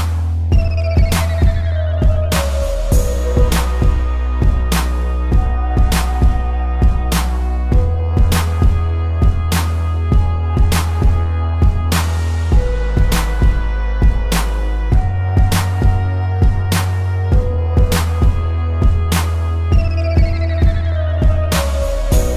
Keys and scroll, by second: 0.2 ctrl+=, 0.5 ctrl+z, 4.0 space, 6.5 space, 7.6 space, 13.4 space, 15.0 space, 15.8 a, 17.0 ctrl+-, 17.4 space, 17.7 z, 18.4 space, 18.7 p.